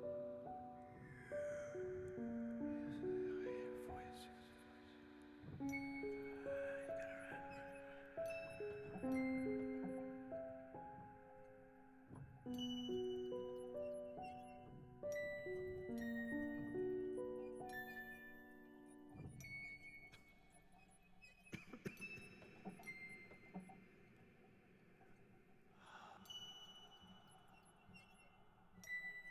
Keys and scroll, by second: 16.1 Tab, 19.6 ctrl+r, 21.2 Return, 27.0 g.